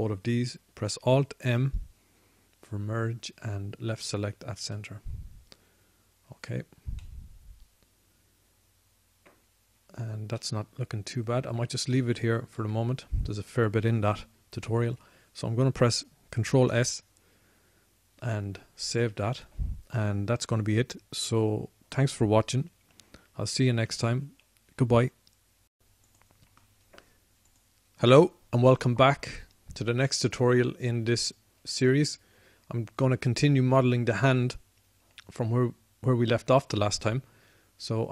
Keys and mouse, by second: 2.6 alt+m, 5.4 alt+m, 6.9 middle click, 8.2 right click, 8.4 middle click, 8.7 middle click, 9.0-10.2 middle drag, 11.4-17.8 middle drag, 18.6 ctrl+s.